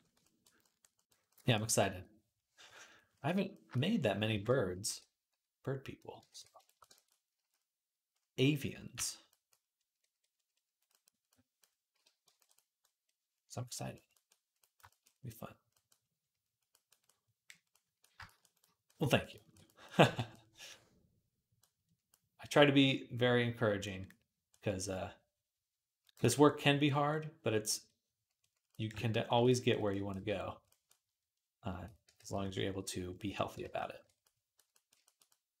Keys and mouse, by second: 2.5 KP_1, 4.2 alt+q, 4.7 r, 6.1 ctrl+r, 8.8 j, 18.9 click, 18.9 middle click, 18.9 right click, 19.6 click, 19.6 middle click, 19.6 right click, 19.9 v, 23.0-25.7 drag, 23.0-25.7 middle drag, 23.0-25.7 right drag, 29.4 click, 29.4 middle click, 29.4 right click, 30.1 d, 32.0 ctrl+z, 33.5 ctrl+z, 34.3-35.6 drag.